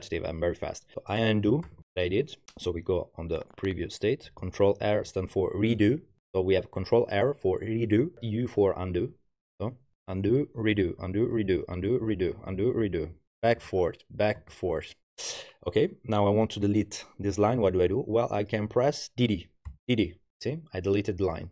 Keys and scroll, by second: 1.2-2.8 typing, 4.8 ctrl+r, 10.0-12.3 typing, 10.6 ctrl+r, 11.4 ctrl+r, 12.9 ctrl+r, 13.4 u, 13.7 ctrl+r, 14.4 ctrl+u, 19.7 typing.